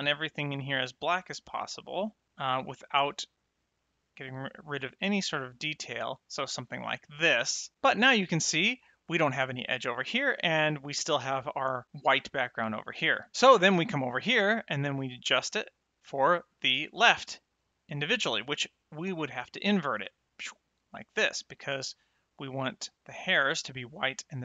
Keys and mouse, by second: 1.7 click, 3.7 click, 8.3 middle click, 13.4 middle click, 16.1 click, 17.3 click, 19.5 click, 21.5 click, 24.3 click.